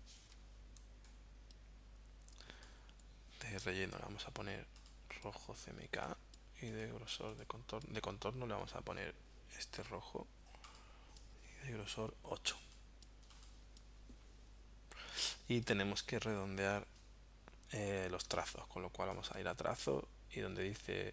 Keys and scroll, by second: 0.3 v.